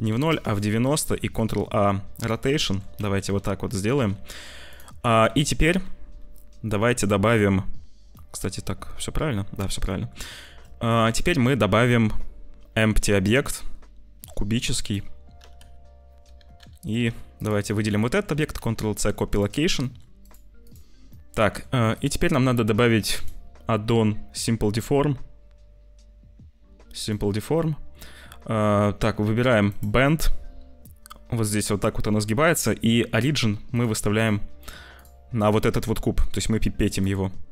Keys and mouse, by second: 1.1 ctrl+a, 2.6 click, 3.0 ctrl+s, 3.6 g, 5.2 shift+a, 8.1 click, 8.1 s, 9.2 click, 9.8 click, 10.3 shift+a, 15.3 g, 18.0 shift+click, 18.5 ctrl+c, 19.7 click, 20.5 click, 21.1 middle click, 21.9 click, 23.1-27.1 drag, 27.6 click, 29.6 click, 33.6 click.